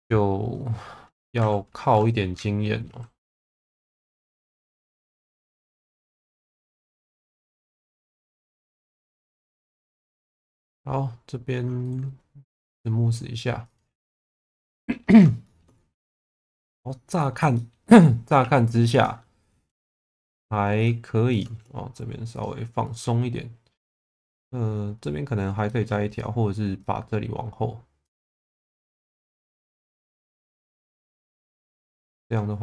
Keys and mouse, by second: 1.4 a, 2.8 alt+n, 8.3 Tab, 9.0 Tab, 9.5 3, 10.1 a, 12.6-14.1 right drag, 14.1 Tab, 14.4 click, 15.4 shift+middle click, 16.3 Tab, 17.5 shift+middle click, 18.4 1, 20.1 shift+v, 20.7 click, 21.5 shift+v, 22.3 click, 24.1 shift+middle click, 25.6 shift+middle click, 26.0 click, 29.9 click, 31.3 click, 32.0 middle click.